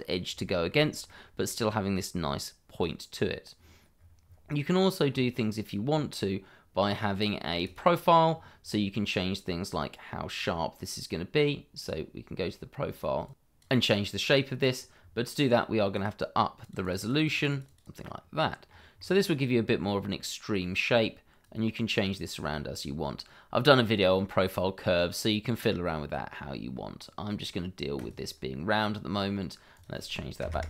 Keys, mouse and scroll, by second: 0.4 shift+middle click, 0.8 scroll up 1, 1.0 middle click, 3.5-5.1 scroll down 1, 5.1-5.7 scroll up 1, 7.6 click, 8.2-8.7 scroll down 1, 9.7 click, 12.2-13.2 scroll up 1, 13.2 click, 14.8 click, 16.8-17.3 scroll up 1, 17.3 click, 17.5 double click, 18.5 scroll down 1, 18.9 click, 20.1-21.4 scroll up 1, 21.4 click, 23.8 middle click, 26.7 scroll up 1, 27.9 click, 30.4 0, 30.5 Return.